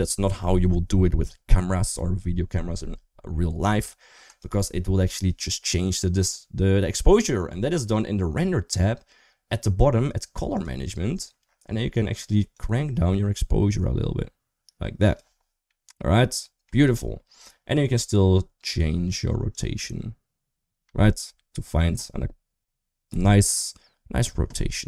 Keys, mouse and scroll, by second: 10.4 click, 12.5-15.0 drag, 15.6 middle click, 19.7-24.8 drag.